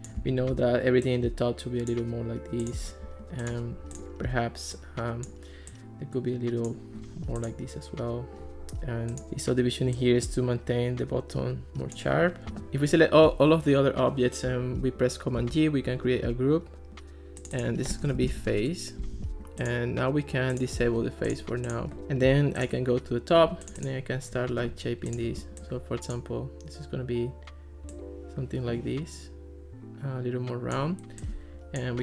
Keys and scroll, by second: 15.4 super+g, 17.8-19.0 typing.